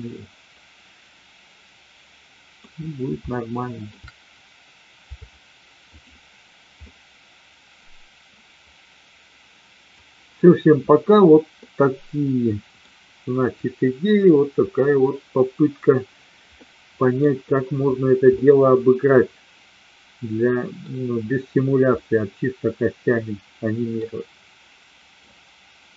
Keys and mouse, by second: 3.3-3.8 shift+middle drag, 6.8-9.8 middle drag, 11.6-12.8 middle drag, 16.6 middle click, 18.4-20.8 middle drag, 22.0-23.8 middle drag.